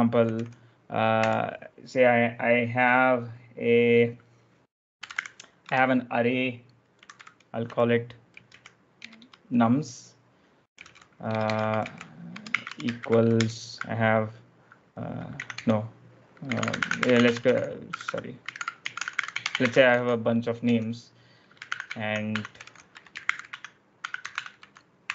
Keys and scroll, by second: 0.0-1.1 typing, 4.7-9.1 typing, 10.4-13.4 typing, 15.4 Escape, 15.5-25.1 typing.